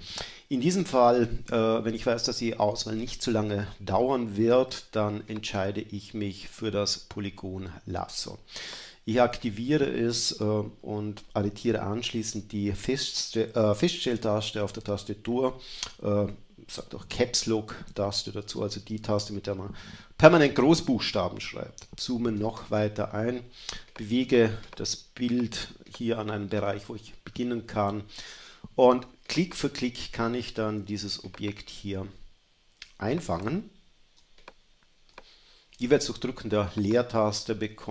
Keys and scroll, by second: 22.0 super++, 22.7 super++, 23.2 space, 34.2 space.